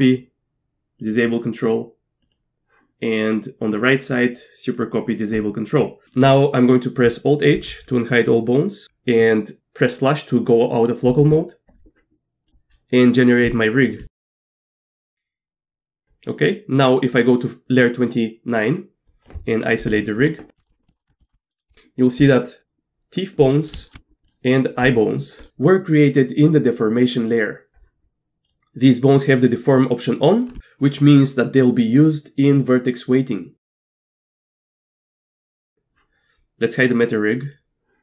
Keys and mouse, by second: 2.3 click, 3.9 click, 5.4 click, 7.6 alt+h, 11.1 KP_Divide, 13.5-15.0 drag, 18.6 click, 20.6 shift+drag, 20.9 shift+click, 21.2 shift+click, 21.5 middle click, 21.7 Tab, 22.2 click, 23.4 click, 23.8 shift+middle click, 24.2 click, 24.8 click, 25.4 middle click, 34.4 KP_Divide, 35.7 middle click, 35.7 Tab, 37.5-37.9 drag.